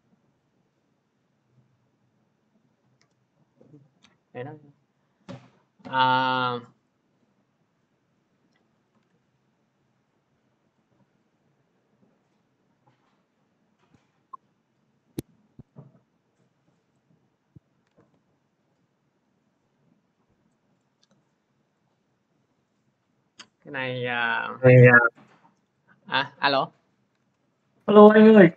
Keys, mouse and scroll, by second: 8.4 click, 8.9 ctrl+z, 9.9 scroll, 15.0 click, 16.8 click, 17.0 middle click, 17.8 ctrl+z, 19.9 middle click, 20.7 middle click, 21.7 click, 23.8-24.3 scroll, 27.0 alt+Tab, 27.7 alt+Tab, 27.8 alt+Tab.